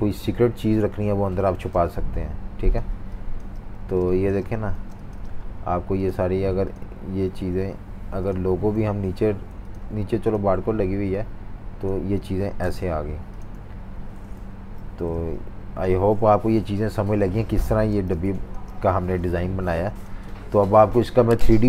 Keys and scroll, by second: 1.5-2.7 typing, 4.5-5.2 typing, 13.8 typing, 14.4 super+-, 16.2 super+-, 16.4 super+-, 17.9-19.5 typing.